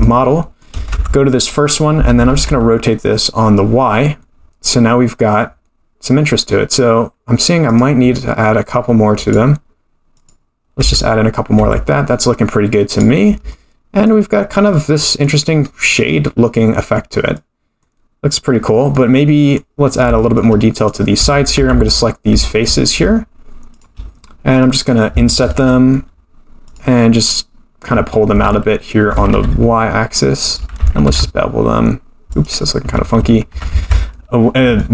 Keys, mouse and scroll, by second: 0.0 shift+middle click, 0.9 Tab, 2.0 r, 9.2 click, 10.1 click, 10.7 Tab, 11.5 Tab, 12.1-12.9 scroll down 1, 12.9 click, 12.9 scroll down 1, 13.5-14.1 middle drag, 14.4-14.7 scroll down 2, 14.7-15.2 middle drag, 15.6-16.6 scroll up 5, 16.6-16.9 scroll up 4, 16.9-17.5 scroll down 2, 17.3-17.9 middle drag, 18.9-19.5 middle drag, 19.9 scroll up 3, 20.2 shift+middle drag, 20.7 click, 21.2 Tab, 21.5 3, 21.8 click, 23.7 shift+click, 24.1-24.6 scroll down 2, 24.6 middle click, 25.5 i, 28.3 g, 31.0 ctrl+b, 32.9 ctrl+z, 33.2 ctrl+z, 33.7 ctrl+z, 34.8 middle click.